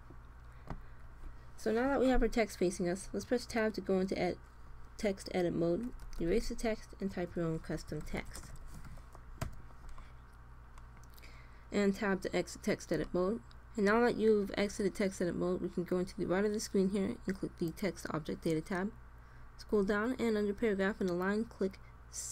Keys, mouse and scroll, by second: 3.2 Tab, 5.8 BackSpace, 6.2 BackSpace, 7.4-8.8 typing, 9.3 Tab, 17.5-19.3 drag, 19.3-21.6 middle drag, 22.2-22.3 drag.